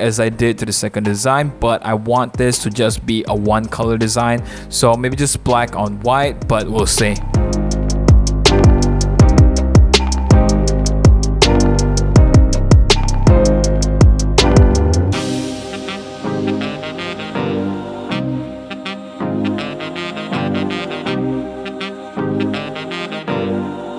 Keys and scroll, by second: 5.4 Return, 5.6 v, 6.5 super+j, 8.1 super+1, 8.2 super+=, 8.4 super+=, 8.4 l, 17.6 super+0, 18.8 super+1, 18.9 super+d, 19.0 v, 19.1 super+a, 19.1 super+c, 19.5 v, 20.0 super+t, 21.5 Return, 21.6 super+a, 22.1 super+a, 22.3 super+c, 22.3 super+d, 22.6 super+i, 22.8 super+j, 22.9 super+i, 23.2 super+i, 23.2 super+a, 23.4 super+c, 23.4 super+d, 23.4 super+v.